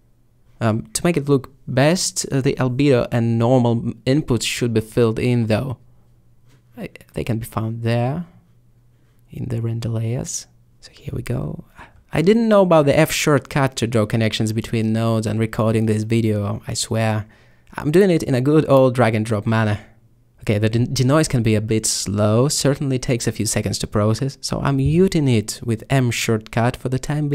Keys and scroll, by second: 24.6 m.